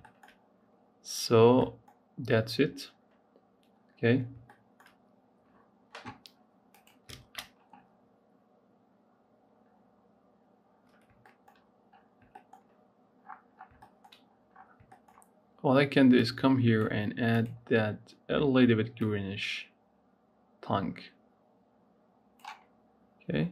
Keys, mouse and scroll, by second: 0.3-0.8 scroll up 2, 1.0-1.9 scroll up 4, 1.5 middle click, 2.6 scroll up 1, 3.2-3.8 scroll down 5, 4.2 shift+middle click, 5.0-8.0 scroll down 1, 13.1-13.7 scroll down 5, 13.7 middle click, 14.2-15.9 scroll up 13, 15.9-17.2 drag.